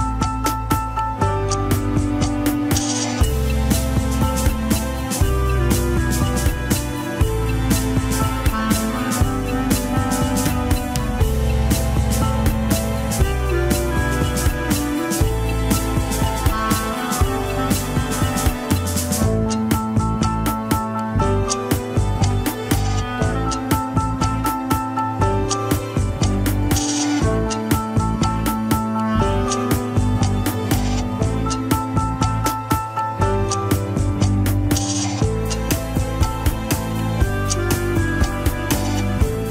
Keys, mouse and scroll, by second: 2.3 click, 5.6-6.4 middle drag, 6.4 ctrl+Tab, 6.6 shift+drag, 7.0 ctrl+Tab, 8.1 ctrl+click, 8.4-10.7 middle drag, 10.7 scroll down 2, 11.1 a, 11.4 alt+r, 11.7 alt+g, 11.8 KP_1, 11.9 ctrl+Tab, 12.8 click, 13.5 ctrl+Tab, 13.9 click, 14.5 r, 17.3 scroll down 1, 17.6-18.4 shift+middle drag, 18.4-18.9 drag, 19.2 g, 24.2-24.5 scroll up 1, 24.5 shift+middle click, 24.9 scroll up 1, 25.0-26.4 middle drag, 26.4 ctrl+KP_1, 26.7 scroll down 2, 27.2 g, 33.3 alt+g, 33.9 click, 34.5 n, 37.0-39.5 drag.